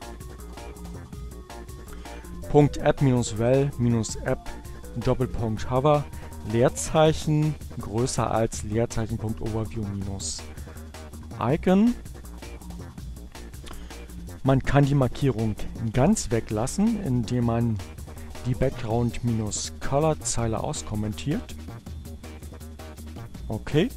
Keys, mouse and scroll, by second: 7.8 Down, 10.4 Up, 12.6 Right, 12.9 Left, 13.1 Left, 15.5 shift+7, 17.7 shift+space, 18.2 Right, 20.9 space, 22.0 7.